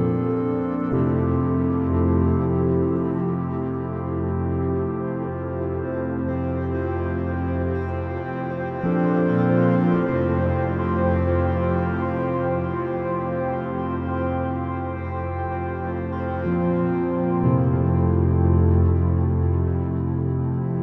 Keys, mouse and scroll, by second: 0.1 middle click, 1.3 KP_3, 3.9-5.8 drag, 6.9-8.7 drag, 8.5 r, 12.0 KP_0, 13.5 shift+z.